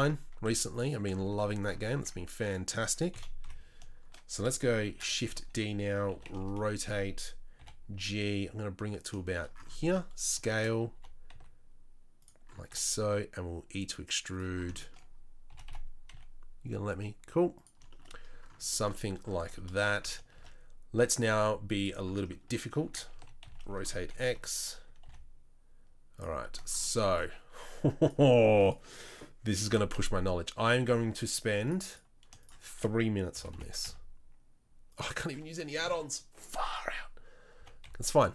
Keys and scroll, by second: 0.4 z, 1.9 Tab, 2.4 Tab, 3.1 KP_3, 3.4 KP_1, 4.8 shift+d, 6.1 r, 7.6 g, 9.8 s, 10.9 g, 12.7 e, 15.5 g, 19.4 Tab, 20.3 shift+a, 22.9 Tab, 23.1 r, 24.1 KP_3, 24.3 KP_1, 25.0 g, 29.6 g, 33.3 g, 37.6 g.